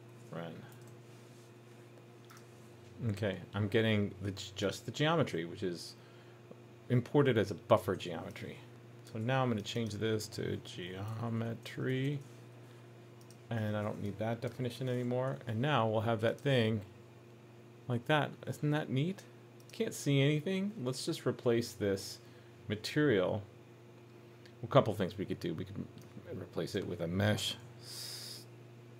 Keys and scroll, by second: 0.9 super+s, 15.3 super+s.